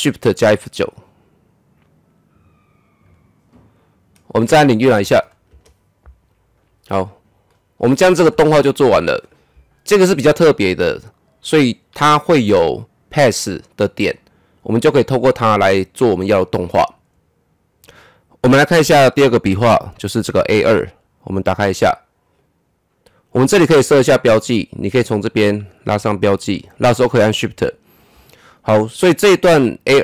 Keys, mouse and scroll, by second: 3.0-5.5 drag, 5.5 KP_0, 7.5-11.9 drag, 18.7 click, 18.7 click, 23.0 shift+1, 25.2-30.0 drag.